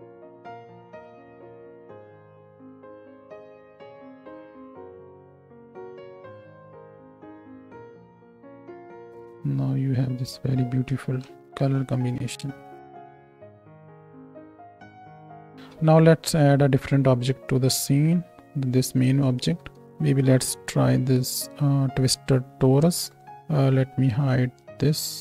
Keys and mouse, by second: 2.1-11.3 middle drag, 6.4 g, 8.9 ctrl+space, 11.3 shift+Left, 11.7 space, 15.3 space, 15.8 ctrl+space, 19.4 shift+a, 23.6-25.2 drag.